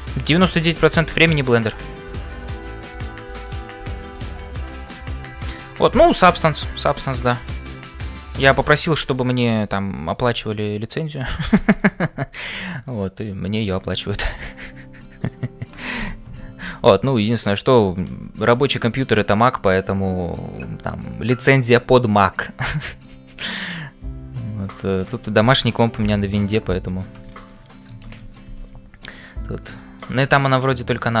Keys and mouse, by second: 0.0-31.2 typing, 0.7 shift+click, 3.3 shift+click, 4.6 shift+click, 9.1 click, 27.2 middle click, 28.2 ctrl+s, 29.8 shift+middle click.